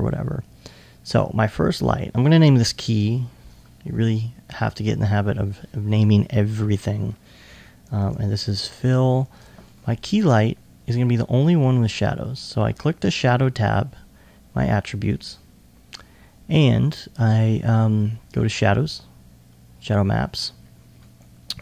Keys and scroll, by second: 2.9 shift+k, 7.8-8.5 typing.